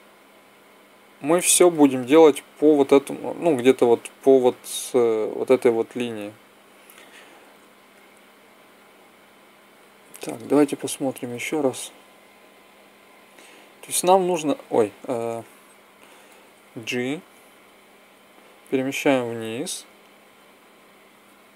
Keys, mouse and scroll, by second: 8.5-11.1 drag, 11.1 Left, 11.4 Left, 11.9 Left, 13.8 Down, 14.1 Down, 17.0 g.